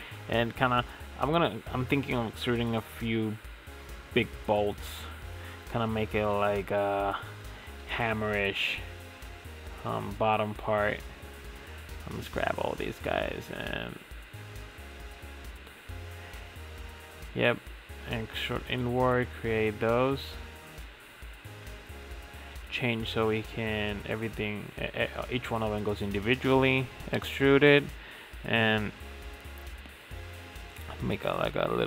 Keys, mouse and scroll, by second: 0.2 middle click, 0.5 e, 1.9 click, 2.8 i, 3.7 s, 5.9 r, 7.0 e, 8.0 ctrl+z, 8.3 ctrl+z, 8.5 ctrl+z, 8.7 ctrl+z, 9.7 ctrl+z, 10.7 shift+click, 11.1-11.6 middle drag, 11.6 shift+click, 11.8 middle click, 12.2 shift+click, 13.1 i, 18.5 e, 20.3 ctrl+z, 20.7-22.0 drag, 22.0 e, 23.9 s, 25.8-27.2 middle drag, 27.2 click, 27.6-28.7 shift+middle drag, 28.7 e, 29.9 e, 31.0 s.